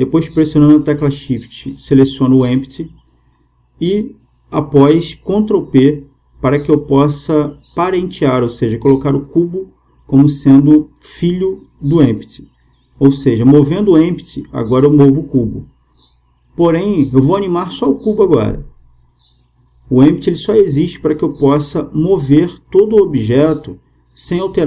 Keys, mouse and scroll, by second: 1.0-2.8 right drag, 6.6 ctrl+p, 10.8-14.2 middle drag, 17.8 KP_0, 20.0-21.8 right drag.